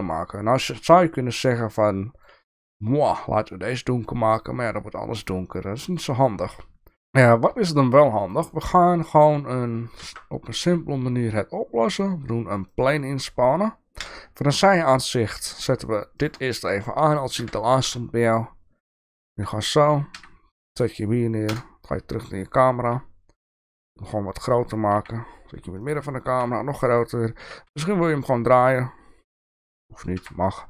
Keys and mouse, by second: 1.8 click, 3.2-6.0 drag, 6.1 click, 8.3 shift+middle click, 9.9 shift+a, 13.9 KP_3, 14.9 shift+middle drag, 16.1 click, 16.6 shift+middle click, 17.4 r, 20.1 g, 21.6 KP_0, 22.5 shift+middle click, 23.4 s, 24.9 g, 26.2 s, 27.4 r, 30.1 g.